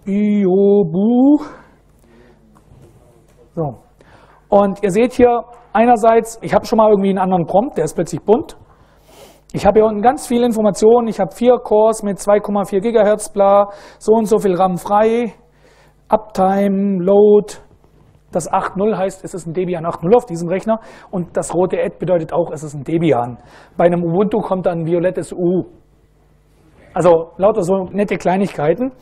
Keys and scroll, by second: 0.0-1.4 typing, 1.6 Return.